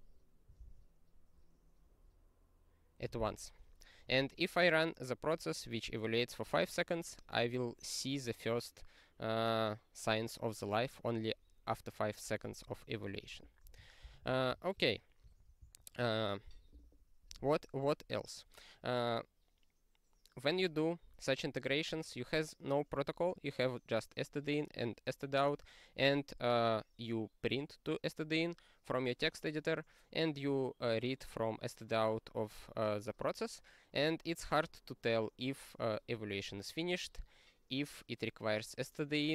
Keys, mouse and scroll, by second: 0.5 ctrl+g, 2.9 q, 13.7 click, 14.2 ctrl+s, 15.2 super+f, 15.7 ctrl+n.